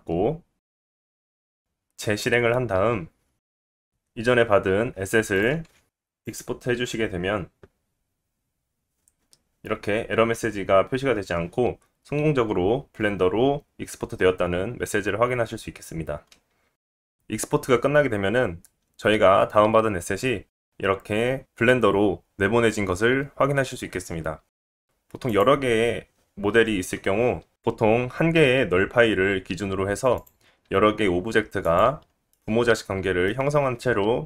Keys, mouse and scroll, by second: 3.0 click, 17.4-18.3 scroll up 6, 18.6 scroll down 1, 22.0-30.2 shift+middle drag, 24.8 click, 24.8 g, 30.2 click, 30.6 g, 32.3 middle click.